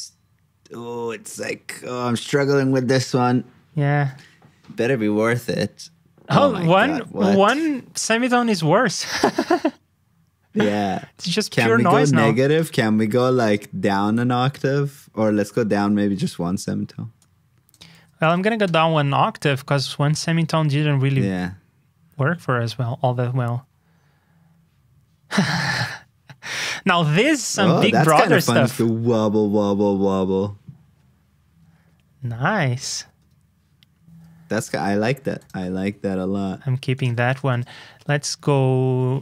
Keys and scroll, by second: 17.9 super+c, 18.3 super+v, 36.1 alt+shift+Down, 37.5 super+Tab.